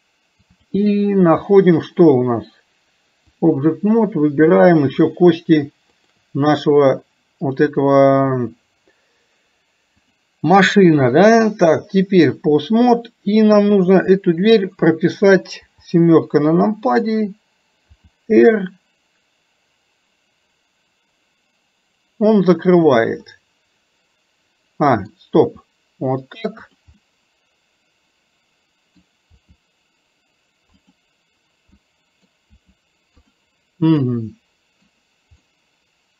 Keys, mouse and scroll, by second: 0.7-3.6 drag, 10.1-11.4 drag, 23.3-25.1 middle drag, 27.1-29.0 middle drag, 31.9 middle click, 34.1-36.1 middle drag.